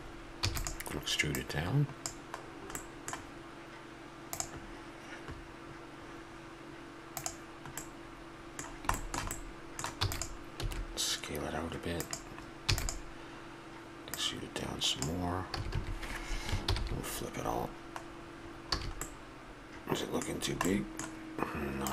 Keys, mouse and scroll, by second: 0.4 e, 1.3-2.8 drag, 2.8 middle click, 4.0 middle click, 7.8-10.0 middle drag, 10.0 e, 10.6 s, 12.6 e, 15.6 a, 15.7 a, 16.6 ctrl+n, 18.4 middle click, 18.5 click, 18.8 a, 20.2 middle click, 20.7-21.9 middle drag.